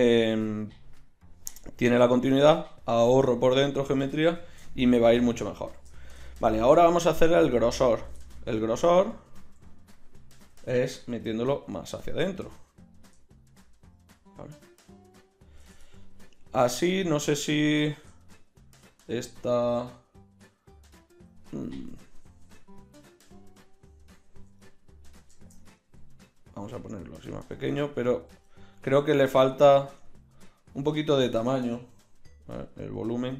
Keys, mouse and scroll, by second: 4.8 KP_1, 8.8 Tab, 9.5 a, 10.5 g, 15.9-17.5 drag, 18.3-22.0 middle drag, 22.5 Tab, 24.1 KP_1, 29.8 Tab, 32.5 s.